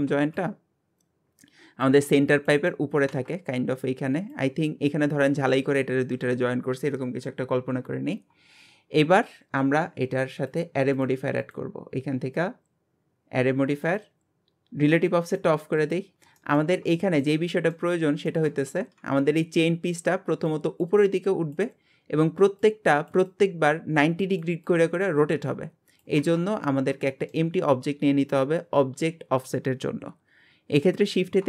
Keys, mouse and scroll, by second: 3.5-4.3 scroll up 2, 4.3 click, 7.9 scroll down 1, 10.5-11.4 drag, 13.9 click, 15.3 click, 15.8 click, 16.4-18.0 shift+middle drag, 18.0-18.3 scroll up 1, 18.3-26.2 shift+middle drag, 26.5 scroll down 1, 27.1-30.2 shift+middle drag, 31.0 shift+a.